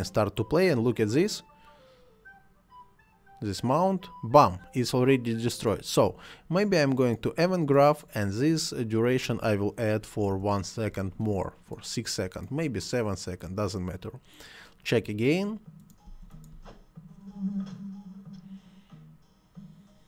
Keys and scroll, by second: 10.1 6, 10.3 Return, 16.0 space.